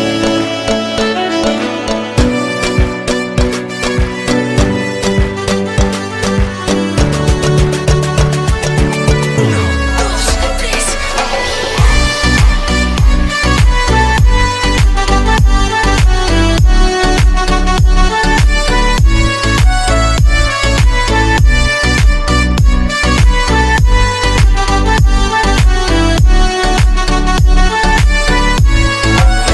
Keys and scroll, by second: 10.5 shift+Page_Down.